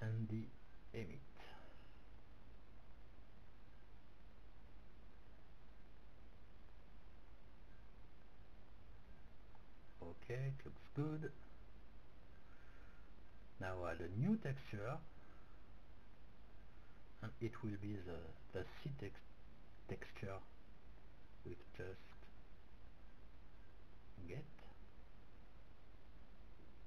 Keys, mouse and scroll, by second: 7.9 middle click, 9.3-11.7 middle drag, 11.7-13.3 drag, 14.6-16.6 drag, 17.2 click, 17.7-20.8 middle drag, 20.0-20.6 scroll up 1, 20.8-22.5 drag, 26.8 click.